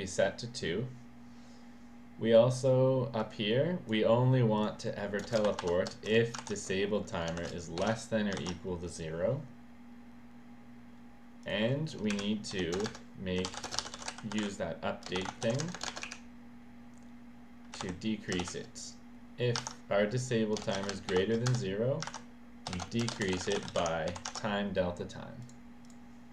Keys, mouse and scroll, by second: 3.2 click, 4.6 click, 5.2 space, 5.4 shift+7, 6.0 space, 6.4 ctrl+v, 7.6-8.3 typing, 8.4 ctrl+s, 11.4 click, 12.1 Up, 12.5 End, 12.8 Return, 13.1-16.0 typing, 15.6 Return, 17.8 i, 20.5-21.3 typing, 21.5 Return, 22.4-24.6 typing, 25.4 click, 25.8 click.